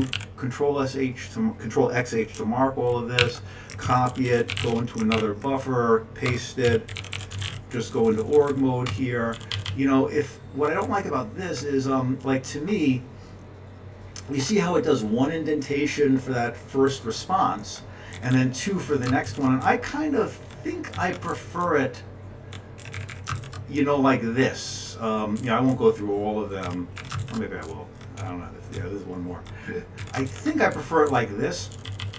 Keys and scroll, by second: 3.2 Down, 4.5 alt+w, 5.1-10.1 typing, 10.2 Page_Up, 11.3 Page_Up, 16.9 Down, 17.4 Down, 17.6-17.9 Down, 18.1 Down, 18.3 Down, 19.2 alt+shift+Left, 20.1 Down, 21.3-22.8 Down, 22.3 Page_Down, 23.1 Down, 23.3-25.0 Down, 23.3 Up, 23.7 alt+shift+Left, 25.7 Down, 26.2 Down, 26.4 Page_Down, 27.2 Down, 27.2 Up, 27.6 alt+shift+Left, 29.2 Page_Down, 30.0 Page_Down, 30.2 Down, 30.2 1, 30.7 Up, 30.7 alt+shift+Left, 31.6 Page_Down, 31.7 Page_Down, 31.8 Page_Up, 32.0 Page_Up.